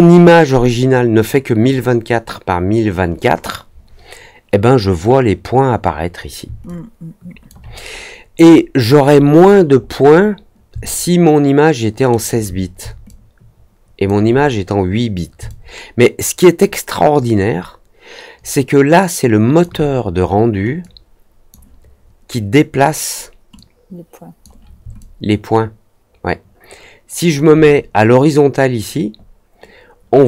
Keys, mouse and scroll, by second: 6.6 alt+click, 8.4 middle click, 9.4 middle click, 9.7 middle click, 10.1 middle click, 10.8-12.0 alt+middle drag, 13.0-14.0 alt+drag, 15.4-19.5 alt+drag, 20.7 click, 23.5 click, 24.9 alt+click.